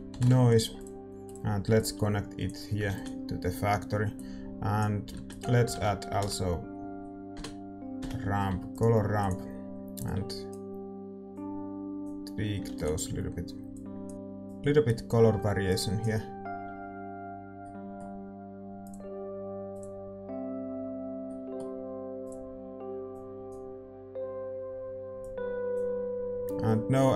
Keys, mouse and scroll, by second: 3.5 ctrl+s, 10.1-13.0 drag, 13.0 ctrl+s, 13.8-17.8 drag, 17.8-23.4 middle drag, 23.4-27.1 drag.